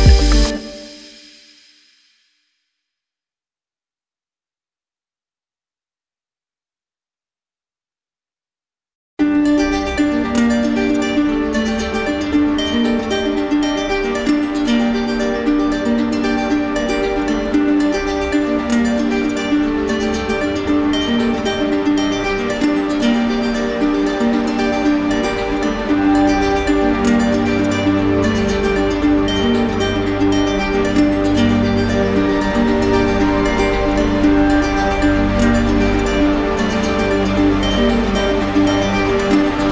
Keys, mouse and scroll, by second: 0.0 alt+click, 0.2 click, 0.3 click, 0.4 right click, 0.6 alt+click, 0.6 right click, 0.8 alt+click, 0.8 right click, 0.9 alt+click, 1.0 right click, 1.1 click, 1.2 click, 1.2 right click, 1.4 right click, 1.5 alt+click, 1.7 right click, 2.0 right click, 2.1 click, 2.2 right click, 2.4 click, 2.5 click, 2.6 right click, 2.6 right click, 2.7 alt+click, 2.8 right click, 2.9 click, 3.0 right click, 3.1 right click, 3.2 right click, 3.3 click, 3.4 click, 3.5 right click, 4.0 right click, 4.4 right click, 5.0 right click, 5.8 right click, 6.3 click, 6.3 alt+right click, 9.0 click, 9.9 alt+click, 12.5 alt+click, 12.9 alt+click, 14.1 alt+click, 15.3 z, 16.3 z, 17.7 right click, 18.9 click, 19.7 click, 20.2 z, 23.1 click, 25.1-26.2 right drag, 26.3-27.7 right drag, 28.9 alt+click, 29.3 ctrl+z, 30.9 alt+click, 32.2 click, 33.4 alt+click, 35.6 alt+right click, 36.3 right click, 38.1 alt+click.